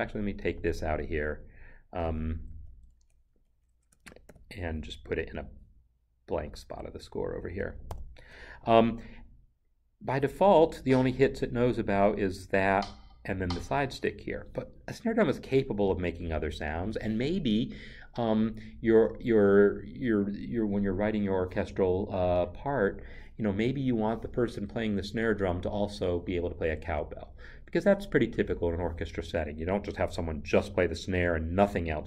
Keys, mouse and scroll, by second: 0.0 click, 2.0 click, 4.3 ctrl+x, 7.9 ctrl+v, 10.7 ctrl+v, 11.0 click, 12.6 Right.